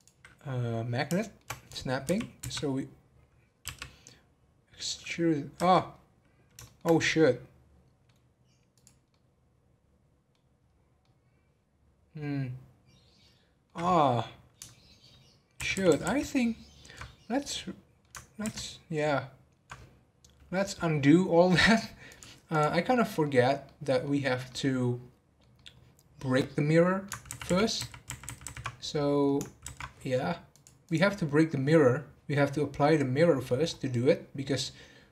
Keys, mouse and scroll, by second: 1.2-2.0 shift+middle drag, 2.0 g, 5.9 scroll down 3, 6.6-8.7 shift+middle drag, 8.7 click, 9.1-10.6 middle drag, 10.6 scroll up 1, 11.0-13.7 middle drag, 13.7-15.5 scroll down 1, 15.5 ctrl+z, 15.7 ctrl+z, 16.6 ctrl+z, 17.2-18.4 middle drag, 18.4 ctrl+z, 22.0-22.9 drag, 22.9-23.3 middle drag, 23.3 scroll down 2, 23.6-24.2 middle drag, 24.2 scroll up 3, 24.4-27.3 middle drag, 27.3 ctrl+z, 27.4 ctrl+z, 28.9 middle click, 29.6 ctrl+z, 30.5 click, 31.1-31.4 scroll down 1, 31.4 middle click, 31.7 scroll down 2, 32.6-33.6 middle drag, 33.6-34.1 scroll up 3, 34.1-35.1 middle drag.